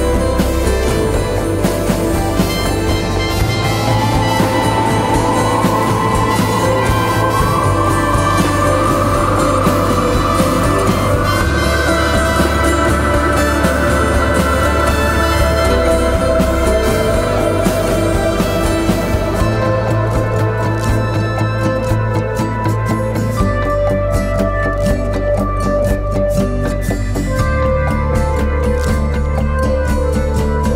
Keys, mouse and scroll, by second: 14.5 double click, 22.8 ctrl+t.